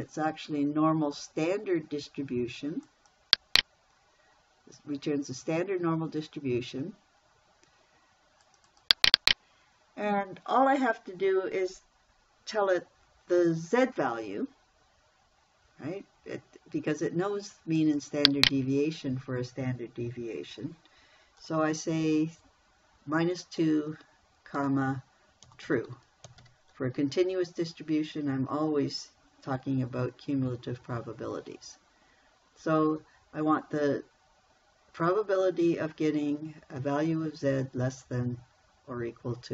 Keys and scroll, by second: 25.0-26.9 typing.